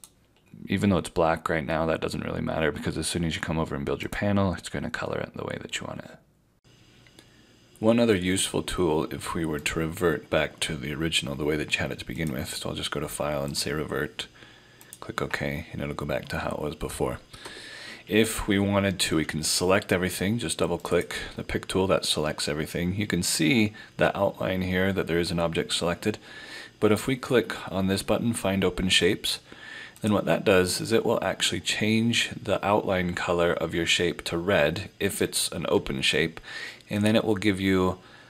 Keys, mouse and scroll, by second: 0.0 click, 4.1 click, 12.2 click, 17.3 F4, 20.8 click, 30.0 click, 37.0 click.